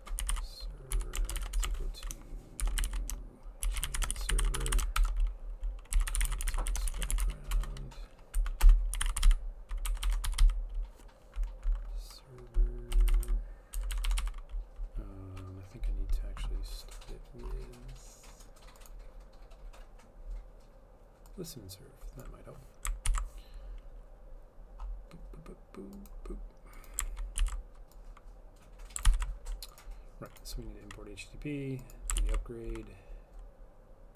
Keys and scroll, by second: 0.0-10.9 typing, 8.4 Right, 8.7 Return, 13.0 Down, 13.0-14.2 typing, 13.1 Down, 13.3 Down, 23.1 ctrl+c, 27.4 ctrl+z, 29.1 ctrl+v, 32.2 ctrl+s.